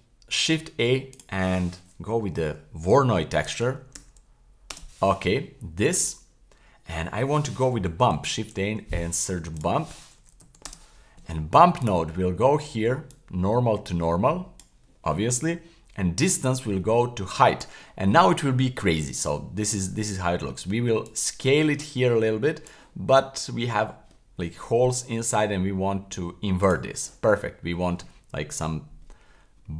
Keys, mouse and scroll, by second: 0.3 shift+a, 6.0 click, 8.1 shift+a, 11.8 click, 13.1 click, 13.3-14.7 drag, 16.2-17.7 drag, 18.4-19.2 scroll up 1, 21.1-22.7 drag, 23.1-24.1 scroll up 2, 26.6 click.